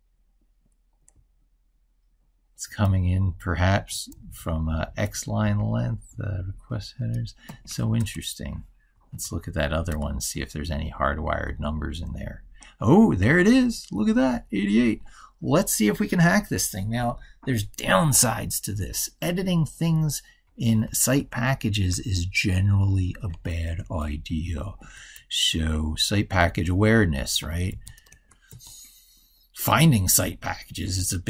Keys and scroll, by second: 21.0 ctrl+super+Left.